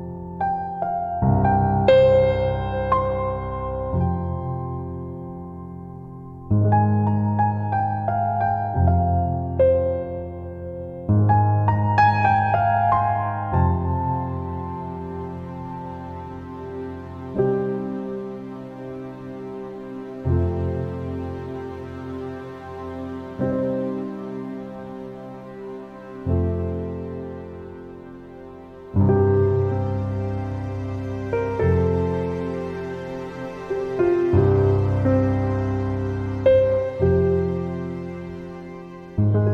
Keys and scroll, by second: 13.6 ctrl+z.